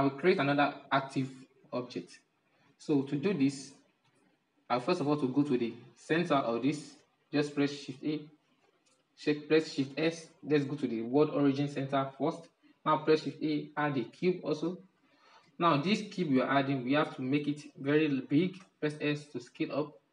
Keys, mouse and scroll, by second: 3.6 alt+a, 7.4 shift+a, 9.4 shift+s, 14.1 shift+a, 15.1-18.1 middle drag, 18.1 s.